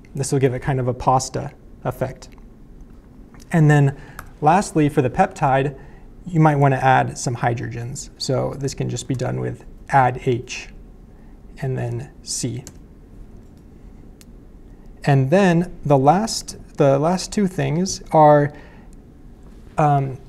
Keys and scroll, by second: 4.2 BackSpace, 6.3-7.9 typing, 9.0 space, 10.5 /, 11.6 shift+c, 12.6 Return, 17.6 BackSpace.